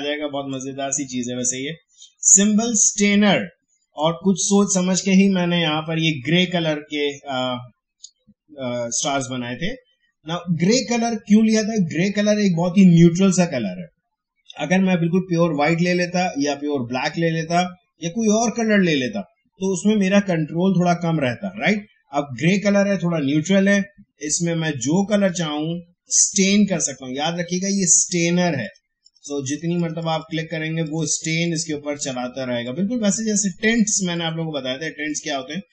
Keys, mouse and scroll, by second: 0.5-6.6 drag, 25.3-35.7 drag.